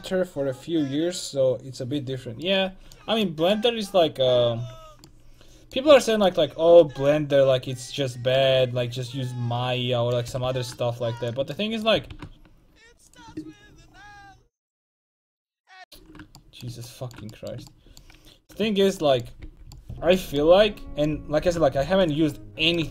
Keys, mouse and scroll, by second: 4.5 l, 7.1-9.2 drag, 9.2 middle click, 10.3 r, 11.9-13.2 middle drag, 12.0 r, 16.4 middle click, 18.7 a, 19.5 l, 21.5 g.